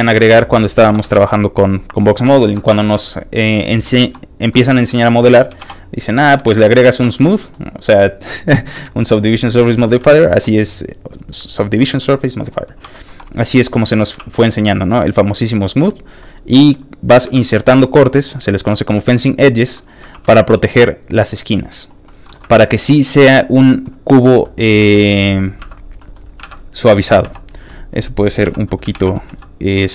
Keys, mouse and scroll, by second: 0.3 shift+middle click, 0.6-1.5 typing, 1.9 shift+click, 2.4 shift+middle click, 2.8 alt+shift+a, 4.5 alt+middle click, 4.9 shift+middle click, 5.6 shift+b, 5.7 click, 6.1-10.2 scroll down 4, 6.2 middle click, 6.4 ctrl+s, 7.1 shift+middle click, 10.2 middle click, 13.0 middle click, 13.5 shift+middle click, 14.2 ctrl+r, 14.4 click, 15.9 click, 16.2 shift+middle click, 16.9-17.2 scroll up 3, 17.3 ctrl+r, 17.5 click, 19.7 ctrl+click, 20.1 ctrl+r, 20.2 ctrl+click, 21.8 click, 22.0 middle click, 22.4 Tab, 22.7 middle click, 23.0 shift+middle click, 23.3 middle click, 24.4 middle click, 24.8 shift+x, 26.0 shift+middle click, 26.2 scroll down 2, 26.4 alt+a, 26.8 l, 27.3 click, 27.3 x, 28.4 l, 28.9 shift+d.